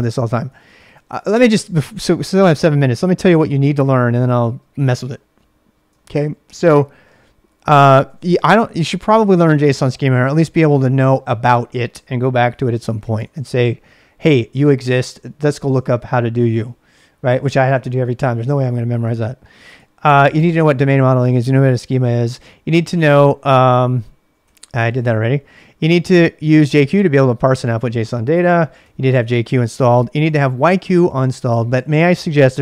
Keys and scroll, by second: 0.0-0.8 typing, 6.0 ctrl+a, 6.2 ctrl+a, 7.2-8.7 typing, 9.8 ctrl+a, 10.0 ctrl+a, 12.2-13.7 typing, 14.4 ctrl+a, 14.5 ctrl+a, 15.3-16.0 typing, 19.7 j, 22.7-26.2 typing, 28.8 typing, 30.2 j.